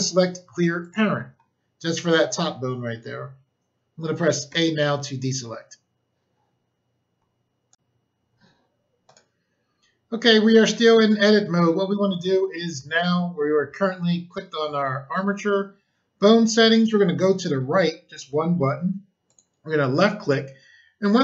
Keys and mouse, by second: 0.7 click, 4.4 a, 7.7 click, 9.0 click, 19.2 click.